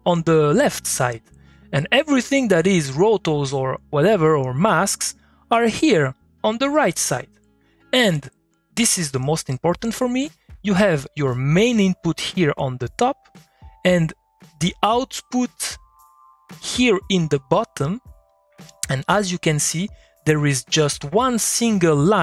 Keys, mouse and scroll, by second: 1.2 middle click, 4.2 click, 4.6 click, 6.0 middle click, 6.1 middle click, 6.2 click, 6.7 middle click, 6.9 click, 7.2 middle click, 10.2-13.2 drag, 13.2 middle click, 13.3 click, 13.5 middle click, 17.8 click, 18.2 middle click, 19.0 click, 19.3 middle click, 19.5 click, 20.0 middle click, 20.2 click, 20.5 middle click.